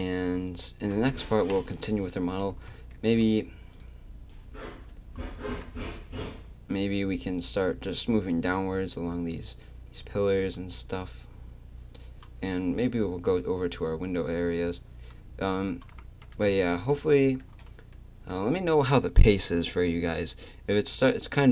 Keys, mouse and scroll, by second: 0.8 middle click, 1.5 KP_7, 4.3 click, 4.3 right click, 5.2 middle click, 5.4 a, 16.4 Tab, 17.5 a.